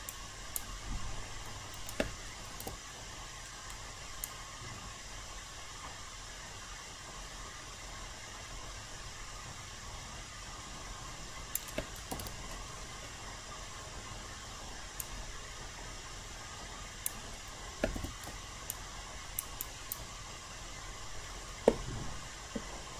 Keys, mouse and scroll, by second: 0.1 alt+right click, 1.0 alt+middle click, 2.5 ctrl+e, 4.2-11.9 drag, 12.1 ctrl+e, 15.0-17.9 drag, 17.9 q, 18.7 alt+click, 19.5 alt+right click, 20.3 alt+middle click.